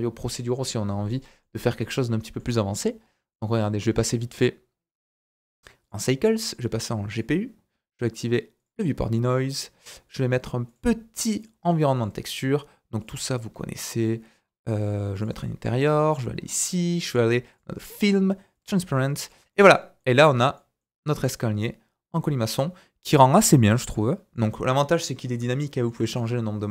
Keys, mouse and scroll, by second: 5.4-8.6 drag, 10.1 click, 15.7-16.1 right drag, 16.1-17.5 drag, 16.4-17.5 scroll down 4, 17.5-18.6 middle drag, 17.7-18.5 scroll down 1, 18.6 click, 19.2 middle click, 19.3-20.5 shift+drag, 20.0 shift+middle click, 20.5 middle click, 20.9 scroll up 1, 21.2 middle click, 21.8 right click, 21.8-22.2 scroll down 2, 23.9 shift+middle click, 25.6 shift+middle click.